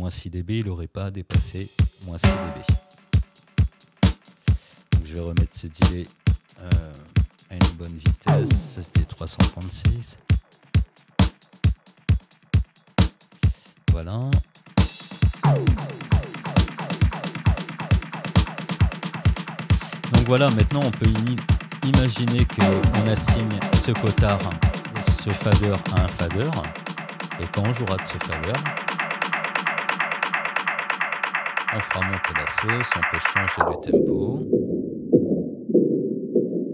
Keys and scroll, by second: 1.3 space, 9.0 3, 9.4 6, 9.6 Return, 26.1 space.